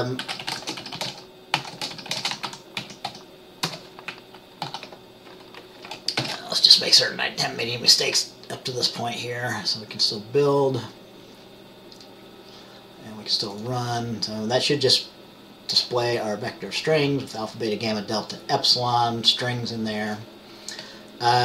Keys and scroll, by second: 0.3-3.2 typing, 3.8 Return, 4.7 ctrl+s, 6.3 ctrl+b.